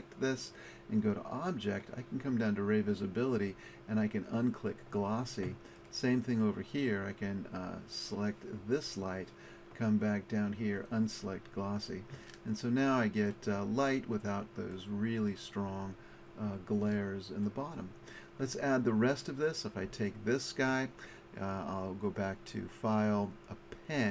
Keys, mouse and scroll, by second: 1.0-2.6 middle drag, 19.1-21.1 drag, 22.2-24.1 drag.